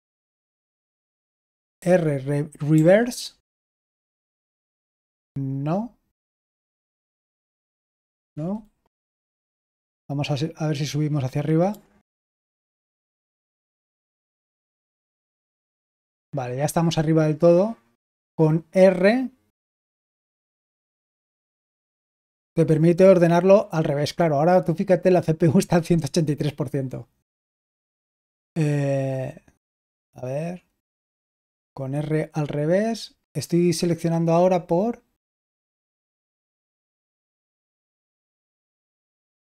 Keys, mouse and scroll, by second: 2.6 typing, 3.8 typing, 6.8 typing, 7.4 Right, 8.1 Return, 9.5 Up, 10.1-10.7 Up, 11.6 Page_Up, 12.1 End, 12.5 End, 12.9 End, 13.5 End, 14.0 Page_Up, 14.4 Page_Up, 15.1 Page_Up, 21.0 typing, 22.1 typing, 35.5 Left, 36.5 Right, 37.6 Left, 38.2 Right.